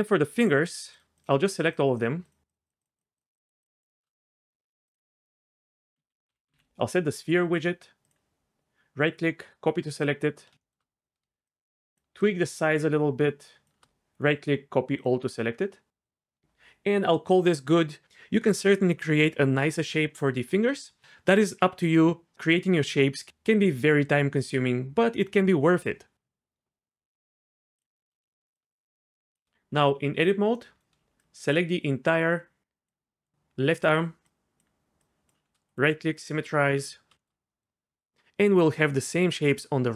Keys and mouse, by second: 1.2 shift+click, 1.6 shift+click, 1.9 shift+click, 2.2 shift+click, 2.8-4.0 shift+drag, 5.0-8.1 drag, 9.2 right click, 11.5 shift+click, 12.3-13.6 shift+drag, 14.1 right click, 27.8 click, 28.6 shift+click, 29.8 Tab, 31.2 shift+click, 34.3 shift+click, 35.0 shift+click, 35.7 click, 36.6 Tab.